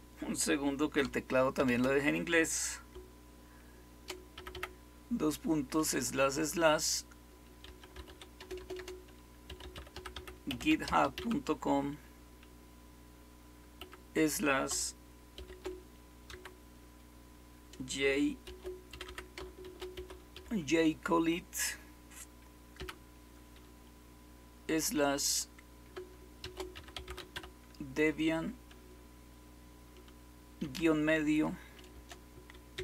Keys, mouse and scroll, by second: 1.5 typing, 4.3 typing, 7.3-11.6 typing, 13.7 typing, 15.3-16.2 typing, 18.2-20.8 typing, 22.7 typing, 26.1-27.8 typing.